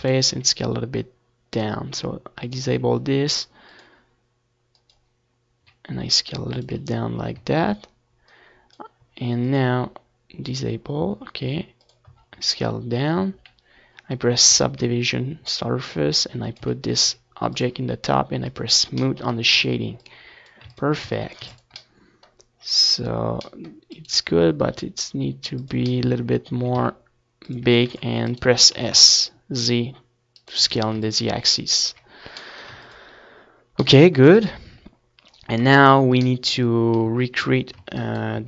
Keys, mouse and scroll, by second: 0.3 s, 1.4-2.5 middle drag, 2.2 z, 3.7 ctrl+2, 4.8-6.8 drag, 6.0 z, 6.5 s, 7.1-8.6 drag, 8.6-10.1 middle drag, 10.3 ctrl+s, 10.6 a, 11.2 ctrl+s, 14.2 s, 15.6-19.4 drag, 16.5 s, 17.6 a, 17.9 ctrl+s, 18.4 z, 18.8 s, 19.4 middle click, 20.6-21.7 right drag, 20.7 z, 21.0 ctrl+s, 22.0 a, 23.0 ctrl+s, 24.6 ctrl+s, 27.5 Tab, 27.7 z, 28.1 Tab, 28.5-29.9 right drag, 28.7 Tab, 29.5 a, 30.4 a, 32.2 a, 32.6 Tab, 32.9 z, 33.5 ctrl+s, 35.0 ctrl+KP_1, 35.9 KP_3.